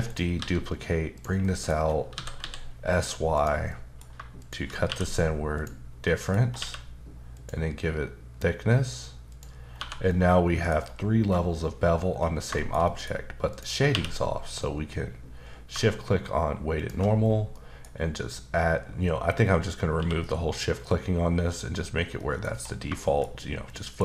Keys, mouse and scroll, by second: 0.1 right click, 0.4 s, 1.1 click, 1.4 middle click, 1.7-2.1 scroll down 1, 2.1 typing, 3.3 click, 3.7 middle click, 4.4 shift+click, 4.9 q, 5.6 click, 6.0 middle click, 6.4 scroll up 2, 6.6 q, 7.3 click, 9.3 click, 9.7-10.1 scroll down 1, 10.1 middle click, 10.8-11.2 scroll up 2, 11.2-12.1 scroll down 1, 12.1-12.5 scroll down 1, 12.5 shift+middle click, 13.1-13.5 scroll up 1, 13.5 click, 13.9 q, 16.8 shift+click, 17.2-17.5 scroll down 2, 17.5 middle click, 20.0 q, 22.5-22.8 scroll up 2, 23.0 shift+middle click.